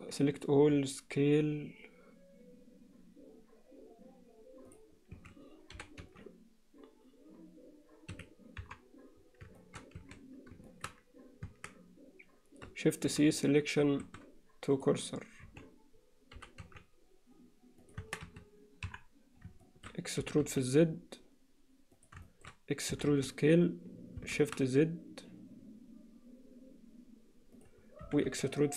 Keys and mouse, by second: 0.6 s, 5.2 a, 5.8 g, 8.6 KP_3, 9.6 alt+shift+middle click, 10.0 a, 10.7 alt+shift+middle click, 11.5 Tab, 13.1 shift+c, 13.8 shift+s, 15.4 z, 16.4 g, 18.0 Tab, 18.3 a, 18.9 KP_1, 19.6 shift+middle click, 20.2 e, 22.3 alt+shift+middle click, 23.0 e, 28.1 e.